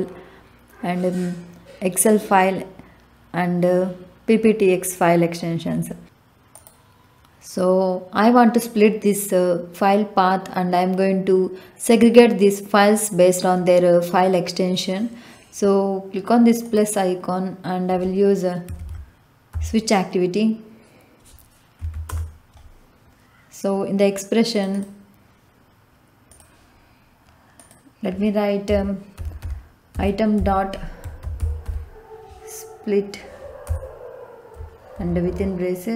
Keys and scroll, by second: 18.4-19.5 typing, 21.7 Down, 22.0 Return, 28.4-31.7 typing, 33.6 Return, 34.9 shift+9, 35.2 shift+0.